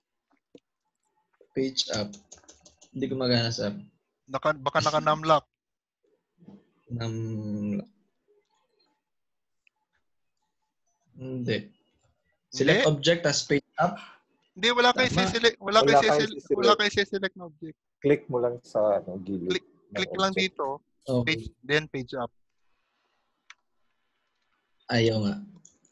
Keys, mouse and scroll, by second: 15.2 click, 20.2 click, 21.4 Page_Up.